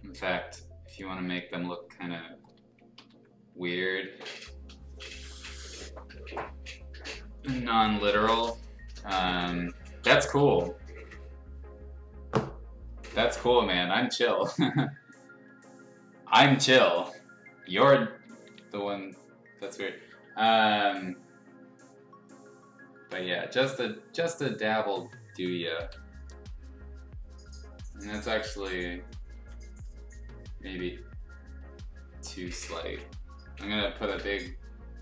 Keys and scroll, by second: 3.0 ctrl+i, 4.2 b, 17.0 x, 18.1 ], 18.9 ], 23.1 ctrl+z, 24.9 ctrl+z, 25.8 0, 29.3 ctrl+z.